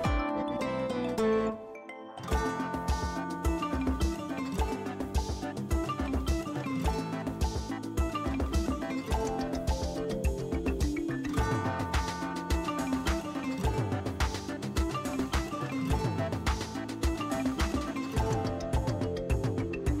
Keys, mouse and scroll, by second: 1.7 ], 1.9 ], 2.1-4.1 drag, 4.1 [, 4.8 [, 5.8 space, 6.2-7.7 ctrl+drag, 7.6 scroll up 1, 10.2-11.9 alt+drag, 11.9 ctrl+shift+f, 13.2 click, 16.0-18.8 typing.